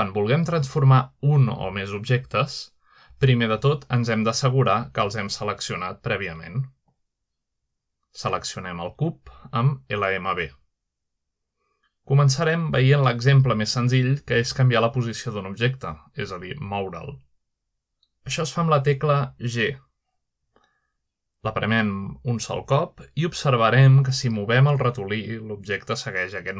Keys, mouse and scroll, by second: 2.1-2.6 middle drag, 6.9 click, 10.0 click, 11.8 click, 16.3-18.8 middle drag, 19.9 g, 22.9 right click, 23.9 right click, 24.0 g.